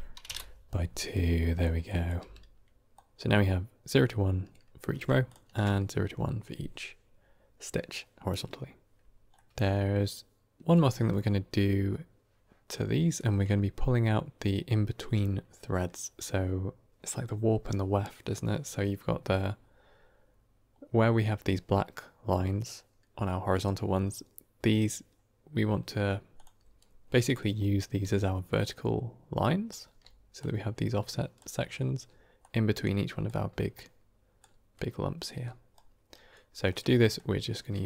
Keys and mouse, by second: 1.1 click, 1.7 drag, 2.1 g, 9.4 middle click, 26.2 click, 27.9 d, 28.4-29.7 drag, 29.5 d, 29.6 d, 29.7 d, 29.9 d, 30.3-31.2 drag, 31.3 d, 32.0-33.6 d, 32.3-34.3 drag, 34.3 d, 35.3 d, 36.0 right click, 36.0 d, 36.0 d, 36.6 middle click.